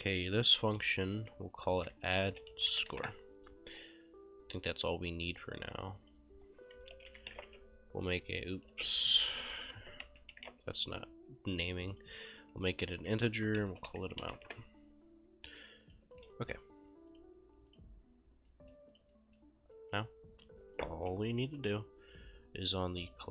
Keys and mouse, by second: 1.5-3.5 typing, 5.4 click, 6.6-8.0 typing, 8.7 ctrl+a, 10.1-11.1 typing, 12.0 click, 13.2 ctrl+a, 13.5-14.9 typing, 15.9 click, 16.2 ctrl+shift+s, 17.2 click, 18.5 right click, 19.0 click, 19.2 right click, 20.8 click, 21.5 Delete, 23.1 click.